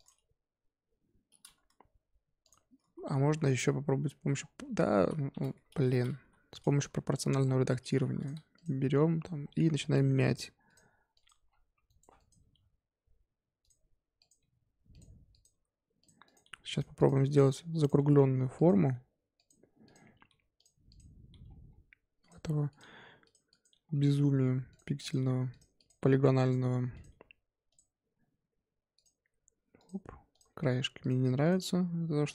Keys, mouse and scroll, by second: 2.4 click, 2.8 ctrl+z, 3.0 ctrl+z, 3.2 ctrl+z, 3.5 ctrl+z, 3.8 ctrl+z, 4.4 scroll down 1, 4.6 ctrl+z, 4.9 ctrl+z, 5.8 Tab, 6.1 g, 6.8 Tab, 7.4-7.9 scroll up 3, 7.9 1, 8.2 click, 8.5 click, 8.9 g, 11.1 click, 11.2 g, 12.1 click, 12.4 g, 14.2 click, 14.4 g, 15.3 click, 15.5-18.9 typing, 16.2 click, 16.9 click, 17.8 click, 19.8 click, 20.2 g, 20.9 click, 21.3 g, 22.7 click, 22.8 g, 23.5 click, 23.7 g, 25.0 click, 25.2 g, 25.7 click, 26.0 g, 26.9 click, 27.1 g, 28.9 click, 29.3 g, 30.3 click, 30.5 g, 31.4 click, 31.7 g.